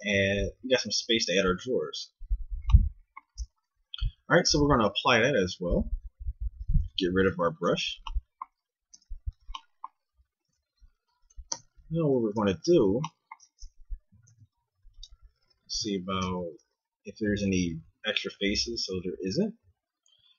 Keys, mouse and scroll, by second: 5.3 click, 6.5 click, 6.5 right click, 7.1 click, 7.3 x, 8.9 t, 10.5 Tab, 11.5 Tab, 12.1 KP_1, 14.2 ctrl+Tab, 15.4 a, 16.2 ctrl+v, 18.6 z, 19.2 a.